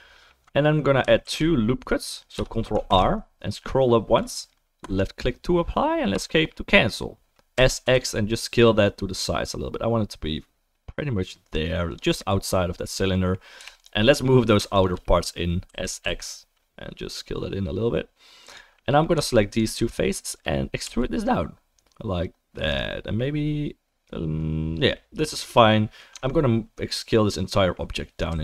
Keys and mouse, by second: 0.1 alt+middle click, 0.2-14.8 alt+right drag, 1.2 ctrl+r, 3.0 ctrl+r, 7.5 s, 13.0-19.1 middle drag, 13.6 3, 13.7 click, 15.7 s, 19.1-25.4 right drag, 19.1 3, 20.2 shift+click, 20.8 e, 25.4-28.4 drag, 26.1 Tab, 28.3 s.